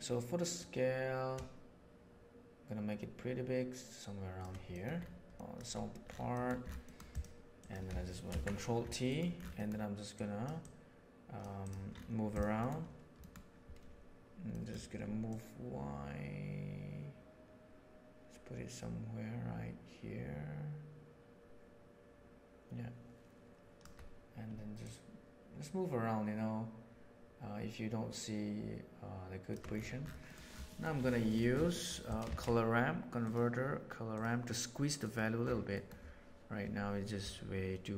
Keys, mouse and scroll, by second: 0.6-3.6 right drag, 4.7 middle click, 5.3 middle click, 6.3 middle click, 6.9 middle drag, 7.5 click, 8.3 ctrl+t, 9.1 middle click, 9.5 middle click, 10.3 click, 10.6 click, 11.5 click, 12.5 middle click, 13.1 middle click, 14.5 middle click, 15.2-16.3 shift+drag, 20.0-23.9 shift+drag, 24.9-29.5 shift+drag, 30.2 middle click, 30.6 middle click, 31.7 middle click, 31.7 click, 32.1 click, 32.2 shift+a, 35.7 middle click.